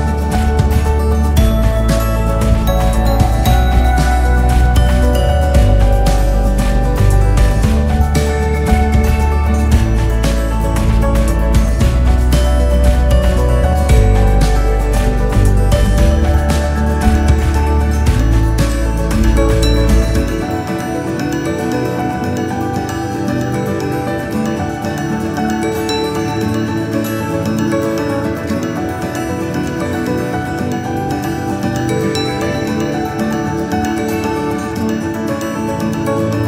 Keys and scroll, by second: 2.4 ctrl+s, 12.1 ctrl+s.